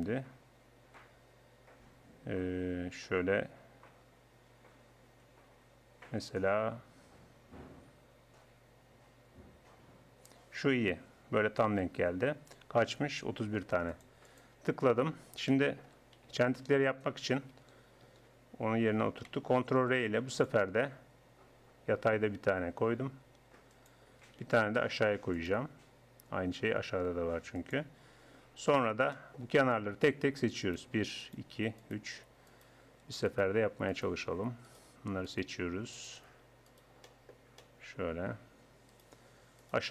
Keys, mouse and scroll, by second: 15.5 middle click, 16.7 ctrl+r, 18.1 Escape, 19.7 ctrl+r, 24.9 ctrl+r, 28.7 click, 29.1-30.5 middle drag, 31.5 right click, 31.6-37.1 middle drag, 37.3 middle click.